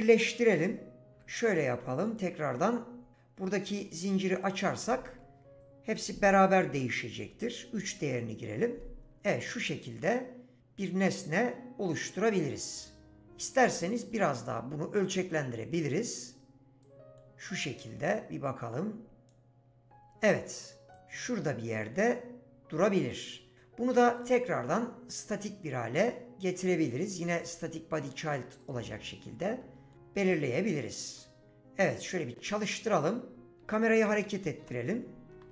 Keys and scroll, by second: 1.1 ctrl+z, 7.2 3, 7.7 Return, 33.4-35.5 typing.